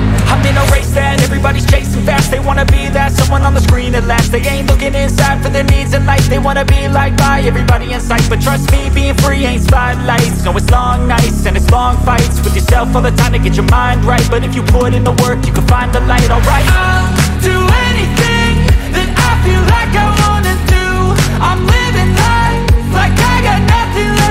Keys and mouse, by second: 0.1 click, 0.3 click, 0.5 click, 0.8 click, 1.2 click, 1.4 click, 1.9-3.6 typing, 2.7 click, 2.9 click, 3.4 F12, 3.8 click, 4.0 click, 4.2 click, 4.6 click, 5.4 click, 5.8 click, 6.3 click, 7.4 ctrl+z, 8.3 click, 8.8 click, 9.5 click, 9.9 click, 10.2 F12, 10.7 click, 11.2 s, 12.7 -, 12.9 click, 13.2 click, 13.4 F12, 13.5 g, 13.7 click, 14.0 click, 15.0 ctrl+shift+f, 15.3 F12, 15.5 -, 15.6 click, 16.5 click, 17.4 click, 19.5 click, 19.7 click, 20.4 click, 20.7 F12, 21.0 space.